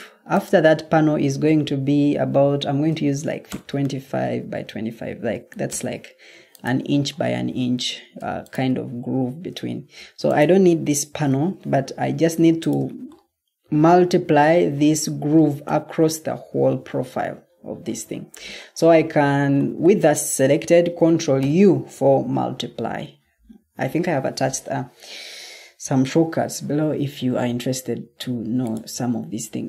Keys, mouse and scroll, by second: 2.6-3.2 typing, 3.4 Return, 5.0-5.4 typing, 5.6 Return, 7.6 Escape, 9.2 Escape, 11.3 Delete, 21.3 ctrl+u.